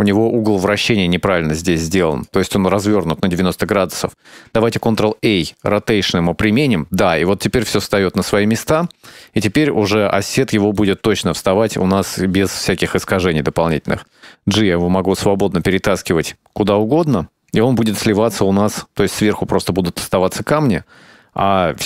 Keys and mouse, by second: 2.2 click, 4.7 ctrl+a, 6.8-7.9 middle drag, 8.9 right click, 10.8 click, 15.2 g, 16.8-17.7 ctrl+middle drag, 17.8-21.8 middle drag.